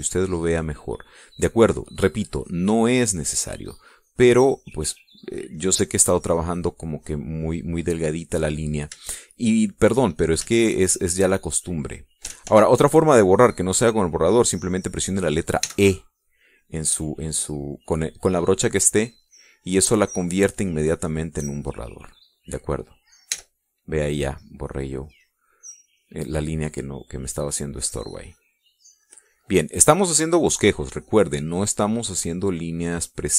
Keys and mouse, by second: 3.9-6.6 drag, 6.8-9.0 drag, 9.1 middle click, 9.7 middle click, 12.0 shift+click, 12.9 click, 13.8 ctrl+z, 17.2 e, 18.9-24.6 drag, 24.8 e, 25.5-27.8 drag, 28.6-31.2 drag, 31.4-33.3 drag.